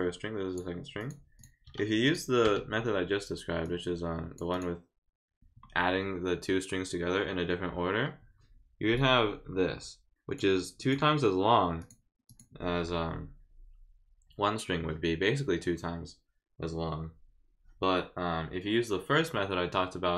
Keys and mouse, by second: 1.0 click, 1.4 click, 2.0 click, 3.6 click, 4.5 click, 8.9-10.4 drag, 10.8 click, 11.8 click, 12.3 click.